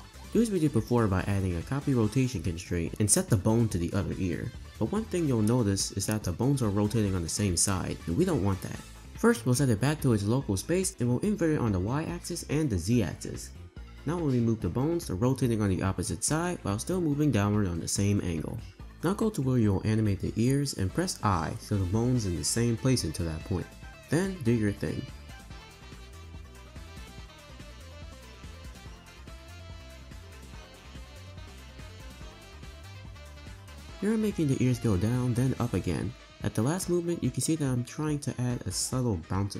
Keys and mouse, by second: 0.8-2.4 drag, 2.9-3.4 drag, 4.6 r, 9.4-10.3 drag, 10.9 r, 12.0 click, 13.7 click, 13.9 r, 15.6 r, 17.8 click, 18.8 space, 19.0 space, 19.2 space, 20.0 i, 21.9 space, 22.1 space, 22.7 r, 24.1 r, 25.2 r, 26.2 r, 26.8 space, 26.9 space, 27.0 r, 28.3-32.3 typing, 29.0 click, 29.9 click, 30.9 click, 33.4 Right, 33.4 Right, 34.7 Right, 35.0 i, 36.7 Right, 36.9 Right, 37.0 Right, 37.1 Right, 38.0 r.